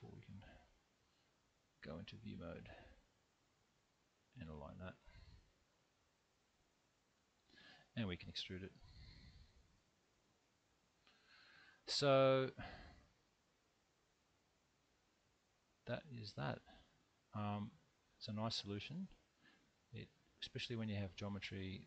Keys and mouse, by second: 0.4 middle click, 3.2-6.3 drag, 7.1 shift+KP_3, 8.8 e, 9.7 t, 10.1 y, 11.2 click, 12.7-15.2 middle drag, 16.2-18.2 middle drag, 18.8 alt+z, 19.4-21.7 middle drag.